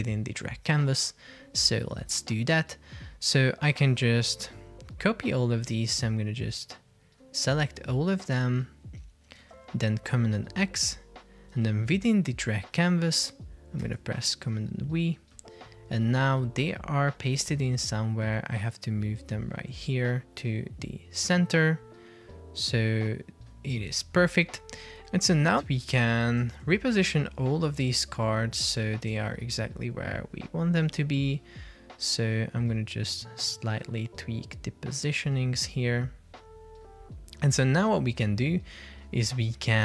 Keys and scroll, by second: 9.5 super+x, 13.9 super+v, 26.5 shift+Left, 28.9 shift+Up.